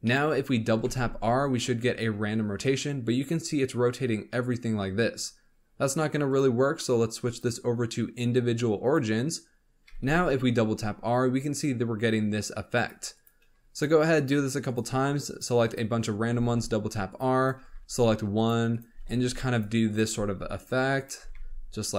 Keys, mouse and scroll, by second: 0.0 shift+middle click, 0.3 scroll up 1, 0.7 r, 7.2-9.8 drag, 9.8 r, 13.1 click, 13.7 shift+click, 14.1 shift+click, 14.6 shift+click, 15.2 shift+click, 15.6 shift+click, 16.3 r, 17.3 click, 17.5 r, 18.7 click, 18.9 r, 19.8 click, 20.0 r, 20.9 click, 21.1 r.